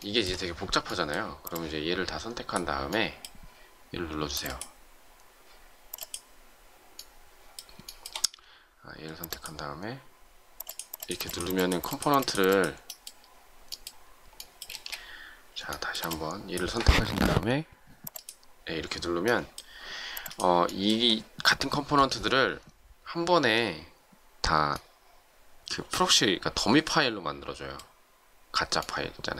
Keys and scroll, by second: 14.6 space.